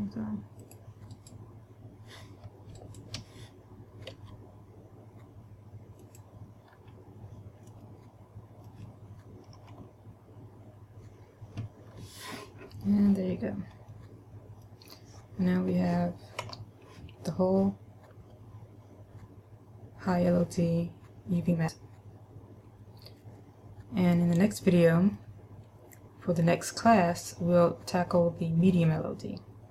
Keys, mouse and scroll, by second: 1.3 click, 1.7 right click, 3.3 shift+right click, 4.7 g, 6.7 click, 7.2-8.2 scroll down 2, 8.3 middle click, 10.1 a, 12.4-12.8 scroll down 2, 12.8-13.8 scroll up 2, 13.8 scroll down 1, 14.4 middle click, 16.9 a, 17.5 middle click.